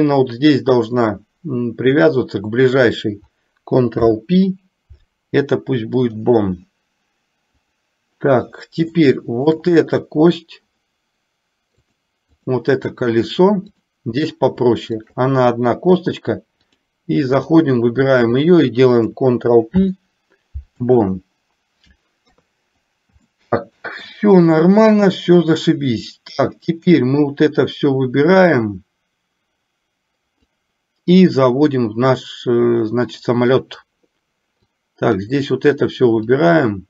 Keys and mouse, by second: 7.8 click, 9.2 shift+middle click, 11.9 click, 13.8 click, 15.1 shift+click, 16.9 click, 18.5 click, 19.9 ctrl+p, 22.4 KP_3, 23.6 shift+middle click, 27.9 click, 30.6-34.0 drag, 34.9 click, 36.5-36.8 drag.